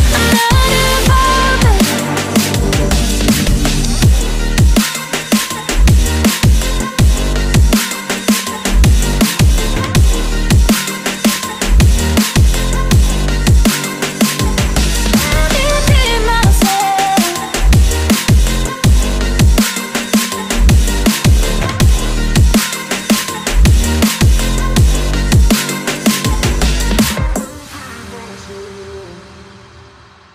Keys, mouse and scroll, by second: 0.0-0.8 typing, 7.2 ctrl+scroll up 1, 8.8-10.5 scroll up 1, 10.5 ctrl+click, 12.3 ctrl+click, 13.1 Right, 13.7 Right, 13.9 Right, 18.9 ctrl+scroll down 1, 19.6 ctrl+scroll up 1, 22.1 right click, 23.3 right click, 25.8 Delete.